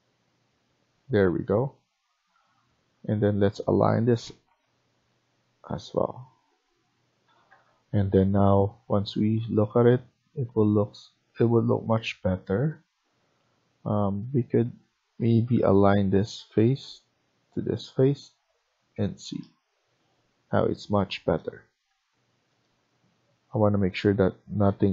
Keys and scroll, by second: 0.8 Escape, 3.8-4.4 typing, 7.2 Escape, 7.4 Escape, 15.1-15.6 typing, 18.1 Escape.